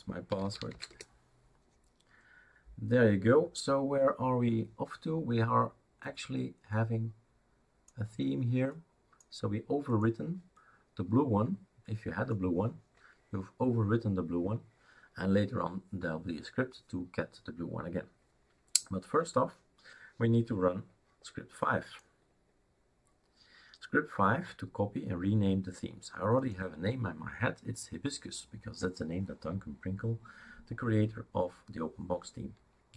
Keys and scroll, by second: 0.3-1.2 typing.